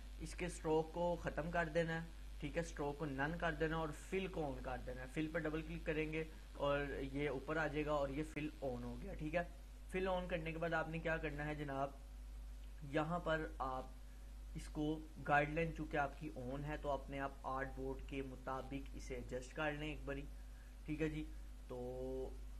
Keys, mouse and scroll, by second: 3.2 click, 9.3-10.5 drag.